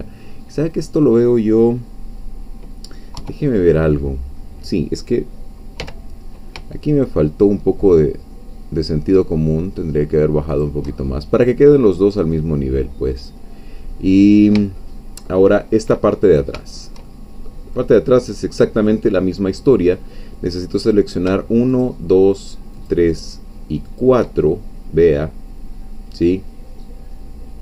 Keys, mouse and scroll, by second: 0.7 click, 3.2 3, 5.8 g, 10.5 shift+click, 11.0-11.3 shift+scroll down 2, 11.4-12.5 middle drag, 12.5-13.2 scroll down 2, 13.2-14.3 middle drag, 14.3-14.9 scroll down 3, 14.9-16.0 shift+middle drag, 16.1-16.6 shift+scroll up 3, 16.6 shift+middle click, 17.5 middle click, 18.0-18.8 scroll up 2, 18.8-20.0 scroll down 1, 20.0-20.8 scroll down 1, 20.8 click, 21.8-23.0 shift+drag, 24.0 shift+click, 24.4-27.6 shift+middle drag.